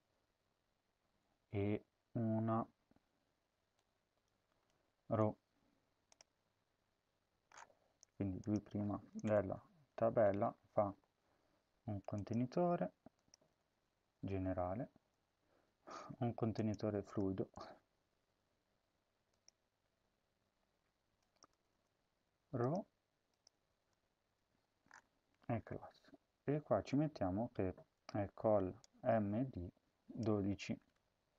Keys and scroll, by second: 4.9 ctrl+c, 9.1 Return, 9.8 Left, 10.4 ctrl+v, 13.3 BackSpace, 13.6 BackSpace, 15.0 BackSpace, 16.9 BackSpace, 18.2 Tab, 19.7 Tab, 21.4 BackSpace, 21.6 BackSpace, 23.5 BackSpace, 23.7 BackSpace, 30.3-31.2 typing.